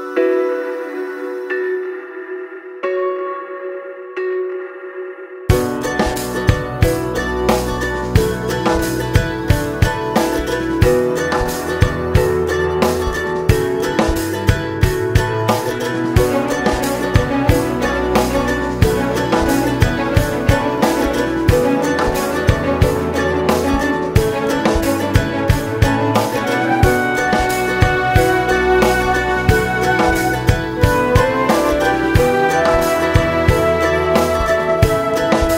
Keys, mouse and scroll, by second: 0.3 ctrl+e, 2.3 scroll down 1, 2.5 `, 4.5 click, 11.5-13.5 right drag, 13.5 click, 13.7-14.1 scroll down 1, 14.1 `, 15.5 Tab, 15.6-15.9 scroll up 1, 15.9 alt+a, 16.8 alt+click, 17.6 shift+click, 17.9 g, 18.8 alt+click, 19.3 shift+click, 19.7 g, 20.1 scroll down 1, 20.3 `, 22.6 Tab, 23.3 1, 24.0 ctrl+r, 24.3 alt+a, 24.7-27.6 typing, 27.3 alt+a, 27.4 Tab, 28.1 Tab, 28.3-28.6 scroll up 1, 28.6 2, 28.9 alt+click, 29.1 alt+shift+click, 30.9 ctrl+e, 31.2 Tab, 31.3-34.4 typing, 31.7 scroll down 1, 32.5 scroll up 1, 33.1 Tab, 33.2 scroll up 1, 34.3 Tab, 35.1 Tab, 35.4 click.